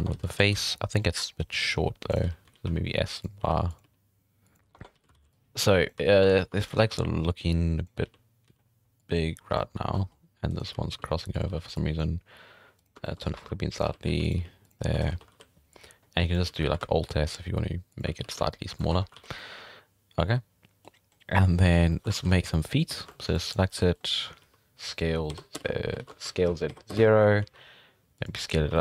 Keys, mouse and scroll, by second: 0.0 Tab, 0.1 z, 0.3 alt+a, 0.5 c, 2.2 z, 2.4 s, 3.4 r, 3.8 g, 4.5 right click, 4.7 Tab, 4.9 z, 5.1 alt+a, 5.3 click, 6.0 z, 6.3 alt+s, 6.7 z, 6.9 alt+a, 7.3-8.0 drag, 8.0 z, 8.4 z, 9.0-9.9 drag, 9.9 shift+middle drag, 10.1 scroll up 3, 10.5 right click, 10.7 z, 10.9 g, 11.5 z, 11.7-12.1 drag, 12.8 click, 13.0 shift+middle click, 13.2 scroll up 2, 13.3-15.1 typing, 14.8 scroll down 2, 14.9 shift+middle drag, 15.3 alt+a, 15.7-16.4 drag, 16.4 z, 16.7 alt+s, 18.2 g, 18.9 Tab, 19.1 scroll down 2, 19.2 alt+a, 19.4-21.1 middle drag, 21.5 scroll up 2, 21.6 Tab, 21.9 shift+middle drag, 22.1 alt+a, 22.2 scroll up 6, 22.9 z, 23.1 shift+middle click, 23.3 click, 23.8 shift+middle click, 24.0-24.4 scroll up 2, 24.4 s, 26.0 ctrl+z, 26.2 s, 27.4 s, 28.7 shift+middle drag.